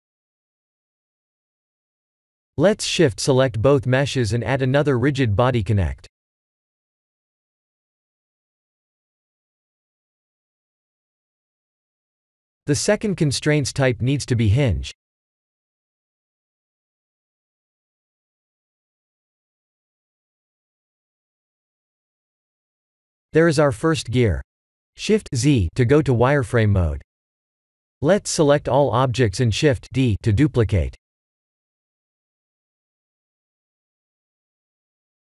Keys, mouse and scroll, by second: 0.0 click, 1.0 click, 1.6 middle click, 2.2-4.0 scroll up 4, 4.0 click, 4.0 scroll up 2, 4.7 shift+click, 6.3 click, 12.9 click, 14.3 s, 15.4 click, 15.6 s, 17.0 click, 17.4 s, 20.9 click, 23.8 click, 27.5 middle click, 28.2 middle click, 30.0 middle click, 30.3 click, 30.6 shift+z, 30.9 click, 31.3 b, 33.2 KP_7, 34.5 click, 35.1 click.